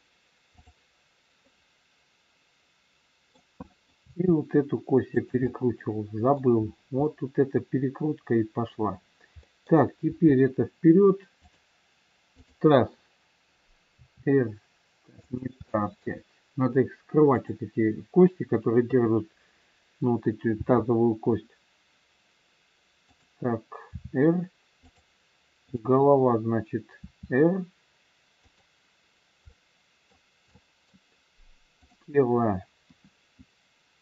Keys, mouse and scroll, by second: 0.5 click, 1.4 middle click, 3.7 middle click, 3.9 r, 5.4 scroll up 1, 5.5 middle click, 6.7-7.0 scroll down 1, 7.0 middle click, 9.6 middle click, 10.1 r, 12.4 click, 13.9 r, 15.6 middle click, 17.3 click, 18.7 KP_3, 20.5 g, 23.9 r, 25.7 click, 27.0 r, 29.4 middle click, 29.4-30.0 scroll up 1, 31.8 middle click, 31.8 click, 32.9 KP_1, 33.9 r.